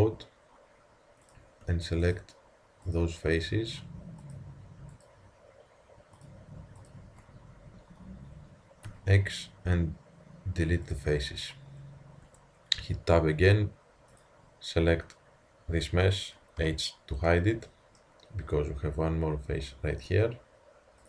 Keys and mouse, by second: 8.6-11.0 middle drag, 8.9 x, 11.5 click, 12.3 Tab, 12.3 click, 14.3-16.7 drag, 16.7 h, 19.9 Tab.